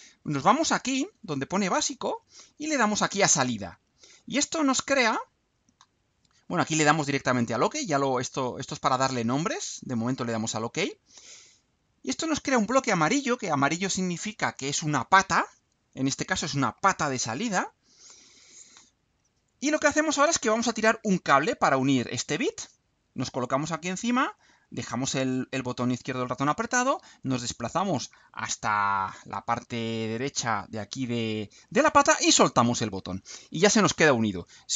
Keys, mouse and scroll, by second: 4.0 click, 9.7 click, 11.7 click, 25.5-32.5 drag.